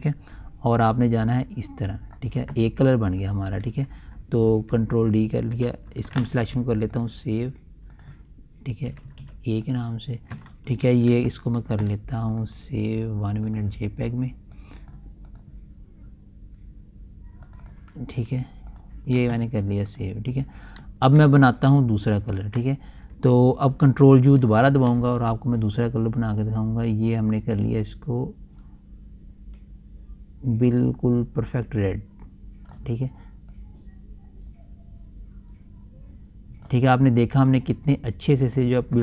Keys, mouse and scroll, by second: 1.5-3.7 drag, 5.0 d, 6.2 alt+z, 7.4 click, 9.4 typing, 10.1 click, 11.3 ctrl+shift+s, 12.8 click, 22.0 ctrl+alt+z, 24.8 ctrl+u, 26.2-38.9 ctrl+drag.